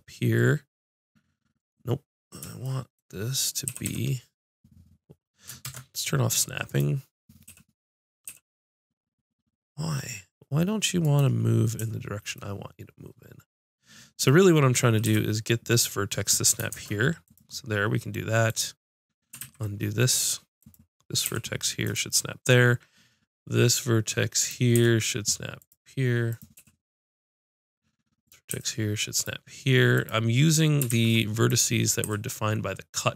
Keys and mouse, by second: 3.7 g, 7.5 g, 11.2-12.6 right drag, 12.6-13.9 middle drag, 14.2-17.3 middle drag, 15.0 g, 18.5 click, 19.4 ctrl+z, 21.3 g, 24.4-30.0 drag, 24.8 g, 26.6 g, 28.5 g, 30.9 ctrl+z.